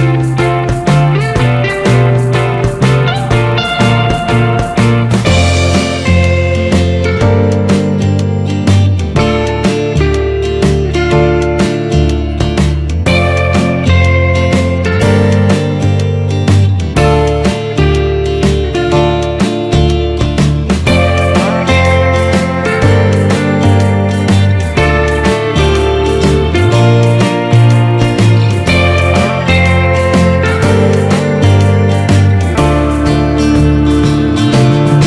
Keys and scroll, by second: 5.9 ctrl+t, 8.4 Return, 11.1 Up, 28.5 ctrl+t, 30.2 Return, 31.4 Down, 32.6 ctrl+t, 34.7 Return.